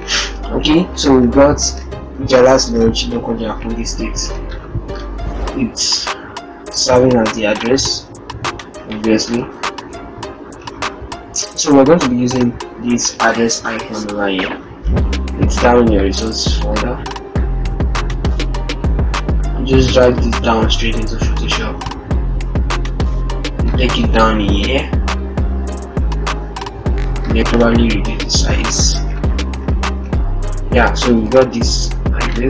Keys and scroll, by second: 0.4 ctrl+-, 4.7 ctrl+t, 6.8 ctrl+z, 13.0 ctrl+alt+shift+Tab, 14.4 alt+Tab.